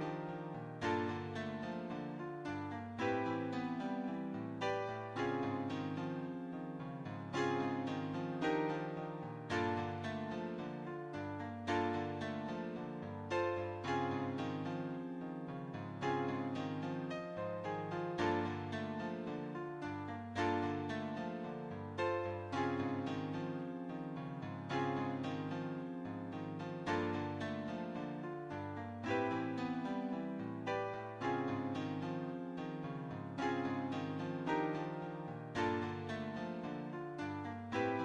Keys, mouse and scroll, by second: 0.1 r, 4.5-6.0 shift+middle drag, 6.5 shift+middle click, 8.2 s, 10.8 r, 13.9 r, 17.2-19.4 shift+middle drag, 20.1 g, 24.1 middle click, 24.8 middle click, 25.4 middle click, 25.7 scroll down 2, 26.3 click, 26.8-32.3 shift+middle drag, 33.1 shift+click, 33.9 shift+click, 34.7 shift+click, 36.8 space.